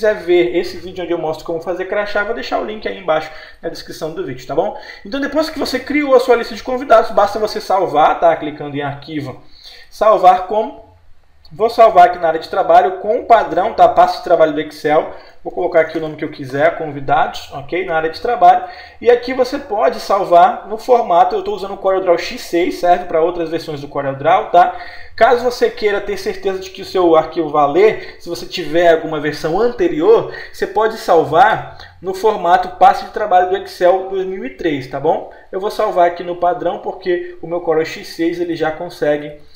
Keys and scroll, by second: 20.4 Escape, 35.4 Escape, 36.8 Escape.